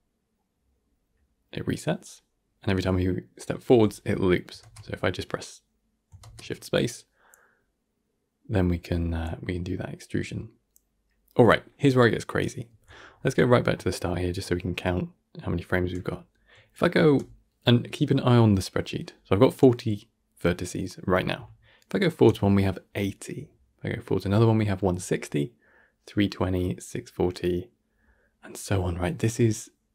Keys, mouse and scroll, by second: 4.6 shift+space, 13.0-13.3 alt+scroll up 4, 14.0-14.3 alt+scroll up 39, 21.8-22.1 alt+scroll down 1.